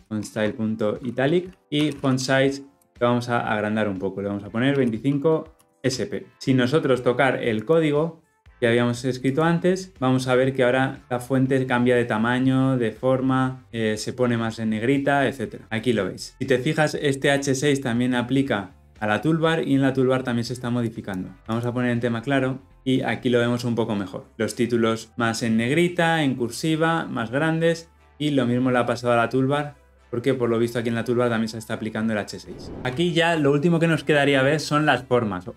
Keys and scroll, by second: 7.5 shift+F10.